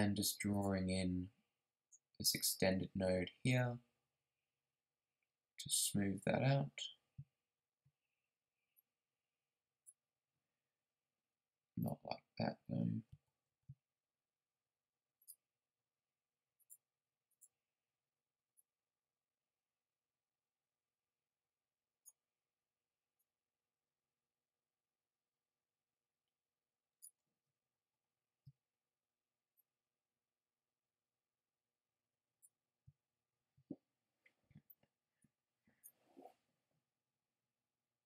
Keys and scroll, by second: 11.7 super+z, 12.8 ctrl+super+z.